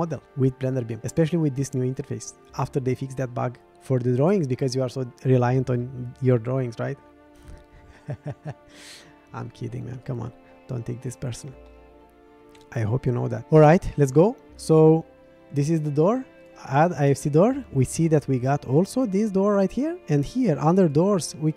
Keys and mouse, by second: 11.8-12.5 middle drag, 13.4-14.3 middle drag.